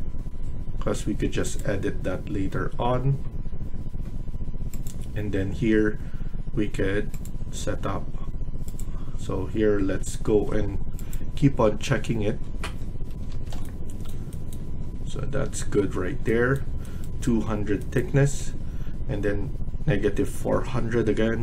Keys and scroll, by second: 12.9 Escape, 13.2 Escape.